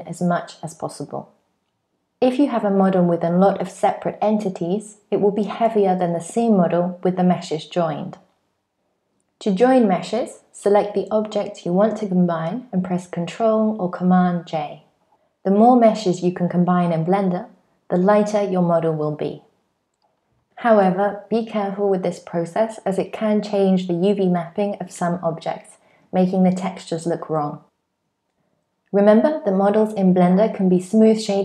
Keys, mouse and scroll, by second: 0.4 super+j, 2.0 click, 2.4 shift+click, 3.4 shift+click, 4.1 shift+click, 5.6 shift+click, 7.0 super+j, 8.1-8.7 scroll up 1, 11.7 click, 12.2 shift+click, 13.8 shift+click, 14.9 shift+click, 15.6 super+j, 16.2 shift+click, 16.6 shift+click, 17.0 super+j, 17.7 shift+click, 18.1 super+j, 18.8 shift+click, 19.4 shift+click, 19.8 super+j, 20.2 scroll up 2, 20.5 shift+middle click, 20.8 scroll down 1, 21.0 middle click, 21.4 shift+middle click, 22.1 super+z, 22.7-23.1 scroll down 4, 23.0 middle click, 23.2 scroll up 2, 23.5 shift+middle click, 24.0 click, 24.3 shift+click, 24.4 shift+click, 24.8 click, 25.0 shift+click, 25.4 super+j, 25.8 shift+middle click, 26.2 click, 26.4 shift+click, 26.6 shift+click, 26.8 click, 27.1 shift+click, 27.4 shift+middle click, 27.4 scroll up 1, 27.7 shift+middle click, 28.0 shift+click, 28.8 ctrl+middle click.